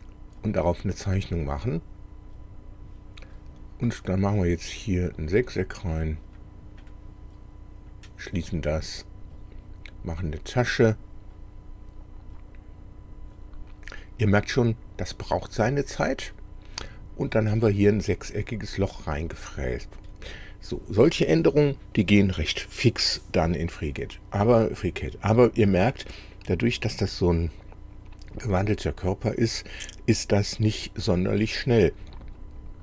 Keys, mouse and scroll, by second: 0.5 click, 4.5 click, 5.2 click, 6.3 click, 6.9 click, 7.9 click, 10.9 click, 17.5-20.3 middle drag.